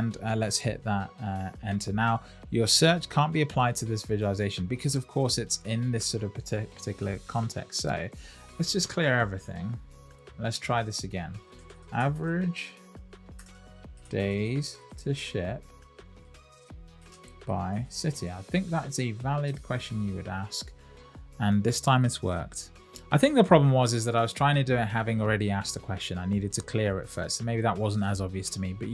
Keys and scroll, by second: 19.4 Return.